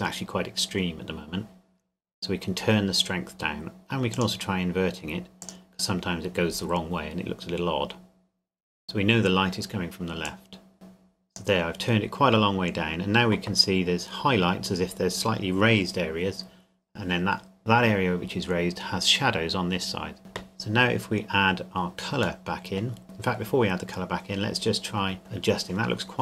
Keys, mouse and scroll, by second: 4.1 click, 10.3 click, 21.4-22.4 scroll down 1, 22.4 middle click, 23.3-23.7 scroll up 1.